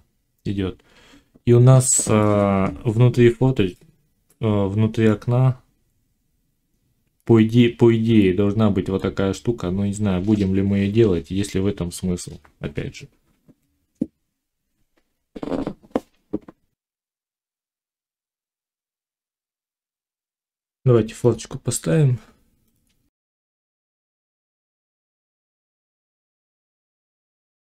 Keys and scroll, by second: 16.9 F9, 19.3 1, 24.6 z, 25.0 Tab, 26.9 z.